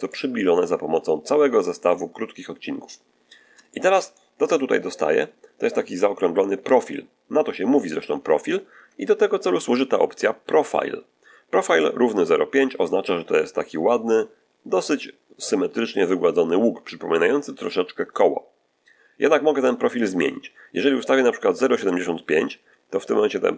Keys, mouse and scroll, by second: 3.1 scroll down 1, 3.6 shift+middle click, 6.1 1, 6.5 3, 21.1 click, 22.8 click.